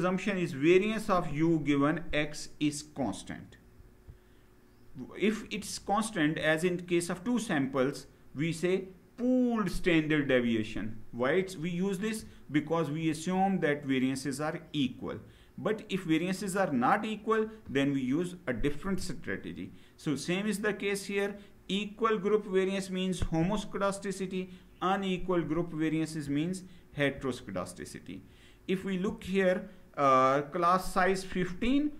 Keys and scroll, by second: 3.6 Down, 26.6 Down, 26.7 Down, 28.8 Left.